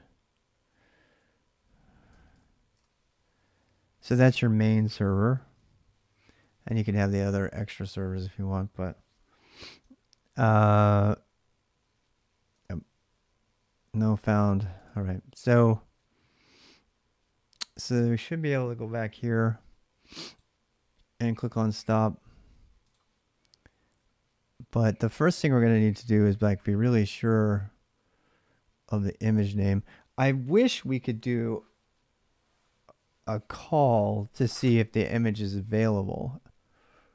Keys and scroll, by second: 0.6 l, 1.9 shift+d, 2.5 Return, 9.5 ctrl+[, 9.7 k, 10.9 k, 12.3 Return, 14.0 ctrl+c, 14.5 alt+Tab.